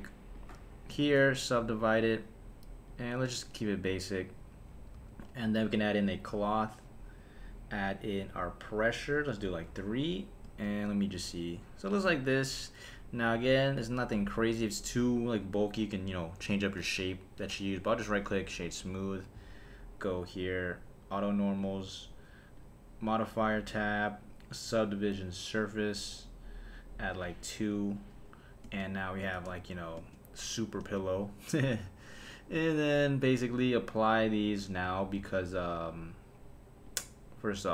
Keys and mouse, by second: 0.3-1.9 right drag, 2.9 click, 3.3 click, 4.3 click, 4.9 Tab, 6.0 click, 8.6 click, 9.1 click, 10.4 space, 11.9 space, 17.8-19.9 right drag, 20.1 click, 21.1 click, 21.6 click, 22.5 click, 23.7-25.6 drag, 27.1 click, 28.6 space, 29.2 space, 29.6 shift+Left, 30.0 space, 30.8 space, 34.6 click, 35.0 super+a, 36.8 click.